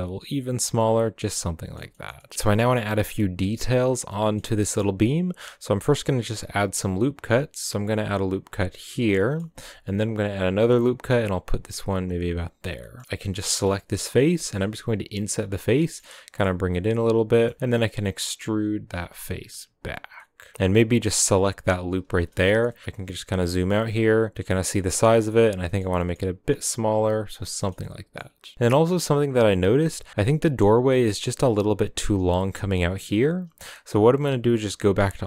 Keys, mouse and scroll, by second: 0.8 scroll down 5, 1.2-2.3 middle drag, 2.3 scroll up 1, 2.4-3.9 shift+middle drag, 3.9 scroll down 2, 4.0-4.7 middle drag, 4.7-5.8 scroll up 2, 5.8 ctrl+r, 9.1 middle click, 9.5 ctrl+r, 12.8 middle click, 13.0 right click, 13.4 middle click, 13.7-14.2 scroll up 1, 14.2 i, 15.7 s, 16.6 s, 17.3 scroll up 2, 17.3 middle click, 17.5 e, 20.0 scroll down 1, 20.1-21.6 middle drag, 21.6 alt+shift+right click, 22.1-22.9 scroll down 7, 22.3 middle click, 22.6 middle click, 22.9 shift+middle click, 23.4 s, 24.6 scroll down 2, 24.7 middle click, 25.3-25.6 scroll up 4, 25.6 middle click, 25.9 s, 27.3 middle click, 27.3 scroll down 3, 27.5-29.5 shift+middle drag, 29.5-32.3 scroll up 1, 32.3-34.3 scroll up 1, 34.3 Tab.